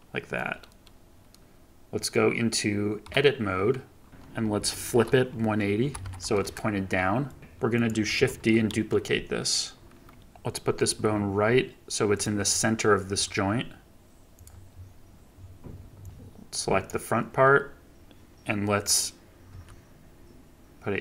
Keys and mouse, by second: 3.0 Tab, 4.1 ctrl+z, 4.9 r, 7.3 click, 7.4 ctrl+z, 7.4 e, 7.7 click, 8.2 shift+d, 10.8 g, 13.0 g, 16.8-19.4 middle drag, 19.4 g.